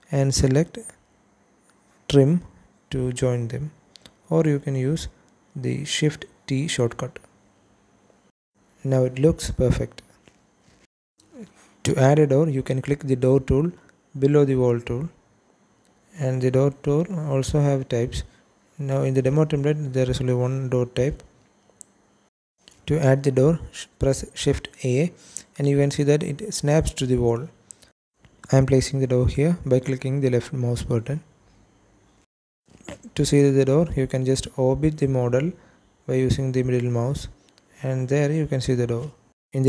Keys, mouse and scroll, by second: 6.5 shift+t, 7.4 click, 8.2 shift+middle click, 15.1 click, 15.7 click, 17.6-19.4 drag, 23.5 shift+a, 30.1 click, 32.6 KP_Enter, 34.2 Escape, 35.9 middle click, 38.2 `.